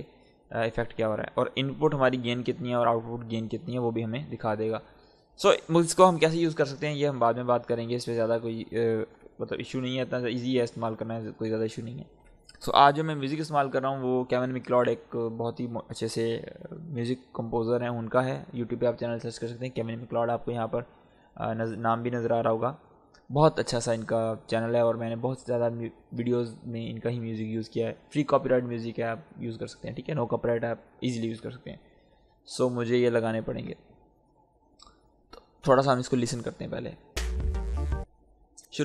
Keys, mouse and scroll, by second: 4.9 click, 5.8 Delete, 7.1 click, 8.9 Delete, 10.0 click, 11.9 Delete, 36.9 click, 36.9 click, 37.1 space, 38.6-38.8 drag.